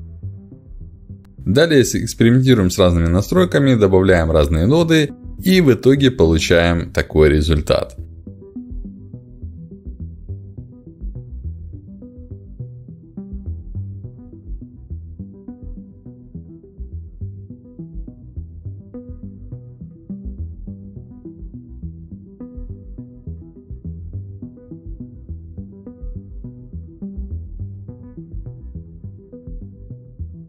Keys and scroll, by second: 3.6 h, 3.8 a, 3.9 i, 4.1 r.